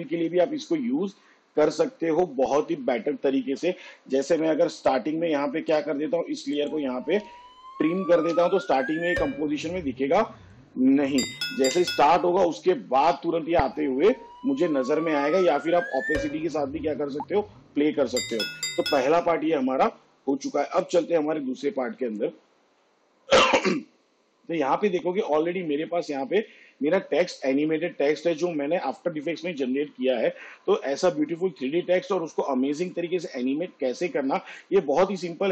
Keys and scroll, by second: 3.5 space, 8.4 alt+[, 11.9 space, 18.5 space, 25.6 space, 29.6 space.